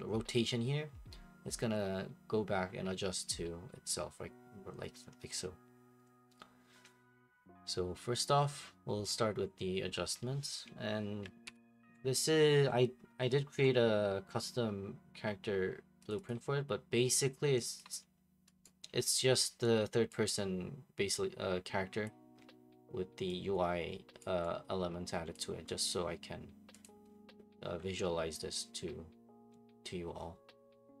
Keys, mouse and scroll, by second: 9.8 Escape, 11.4 ctrl+p, 13.5 Escape, 16.1 click, 16.3 click, 17.8 click, 18.6 right click, 20.1 click, 22.0 click, 25.3 click, 25.9 click, 26.8 click.